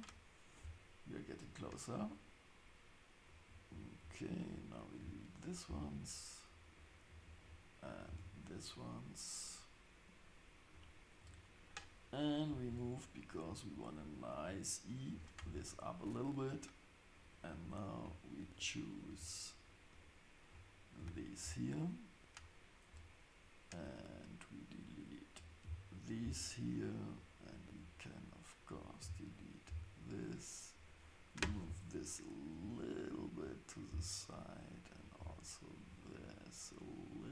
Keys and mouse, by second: 3.4-4.7 drag, 5.0 x, 6.8-8.7 drag, 8.1 x, 10.7-15.3 drag, 12.7 g, 19.9 ctrl+click, 21.0 x, 24.0-26.3 drag, 25.6 x, 27.1-29.8 drag, 29.0 x, 30.8 click, 31.6 g, 35.2 g.